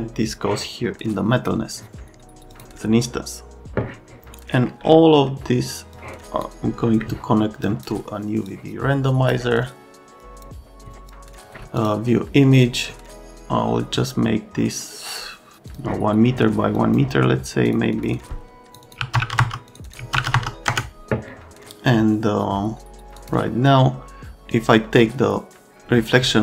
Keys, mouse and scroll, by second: 0.4 click, 2.5 click, 5.9 click, 7.0 right click, 7.7 click, 8.4 click, 10.2 click, 10.6 ctrl+alt+middle click, 11.0 ctrl+alt+middle click, 11.4 ctrl+alt+middle click, 11.8 ctrl+alt+middle click, 15.7 click, 16.7 click, 17.6 click, 17.9 click, 18.7 click, 18.8 click, 19.0 ctrl+alt+KP_1, 19.2 KP_0, 19.7 click, 19.9 click, 20.0 ctrl+alt+KP_1, 20.1 KP_0, 20.7 ctrl+alt+KP_Enter, 23.2 click.